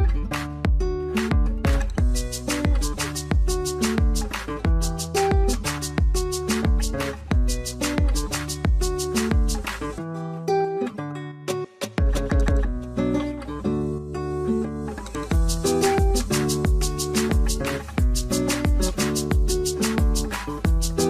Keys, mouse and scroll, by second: 8.2 Return, 9.1-10.1 scroll up 1, 10.6 right click, 20.3 scroll down 1.